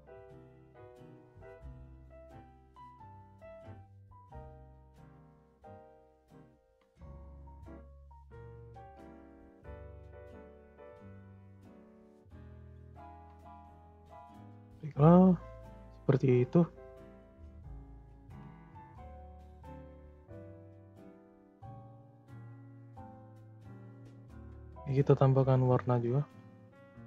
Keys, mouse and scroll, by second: 2.2-3.7 middle drag, 3.7 scroll down 4, 3.9 scroll up 1, 3.9-4.6 middle drag, 4.6 scroll down 3, 5.2 click, 5.6-7.0 middle drag, 7.0-7.6 scroll up 1, 7.6 click, 7.9 scroll up 2, 8.2-8.6 middle drag, 8.6-9.2 shift+scroll up 3, 8.7 shift+middle drag, 9.2-9.9 middle drag, 9.9 scroll up 1, 10.1 scroll down 2, 11.2-11.6 scroll down 1, 11.6-12.0 scroll up 3, 12.0-12.5 middle drag, 12.5 click, 12.9 shift+scroll up 1, 13.0-13.3 shift+middle drag, 13.3 click, 13.6-15.4 scroll down 2, 17.0 click, 17.5-17.9 scroll up 3, 17.9 middle click, 18.7 click, 21.6 click, 22.1-22.6 scroll down 2, 22.6 click, 23.5-24.3 scroll down 2, 24.3-25.3 scroll up 2, 25.3-26.3 drag.